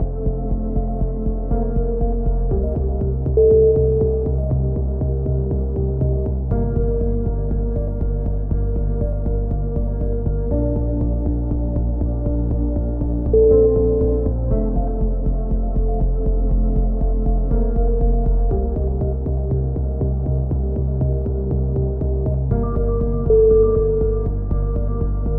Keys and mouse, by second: 0.2 right click, 0.9 middle click, 1.0 right click, 1.6 click, 3.6 a, 6.0 right click, 7.0 right click, 7.8 click, 9.5 click, 11.0 e, 12.1 click, 13.5 middle click, 14.3 click, 15.0 middle click, 15.4-16.5 middle drag, 16.5-17.5 drag, 19.2-20.8 middle drag, 21.0 e, 22.5-24.8 middle drag, 24.8-25.3 drag.